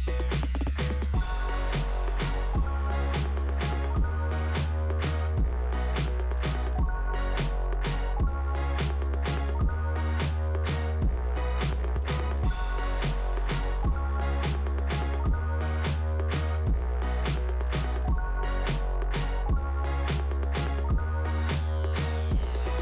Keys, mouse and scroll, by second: 1.4 click, 1.5 click, 3.2 scroll up 1, 8.1 scroll down 2, 10.3-10.7 scroll up 2, 14.5 middle click, 22.5 middle click.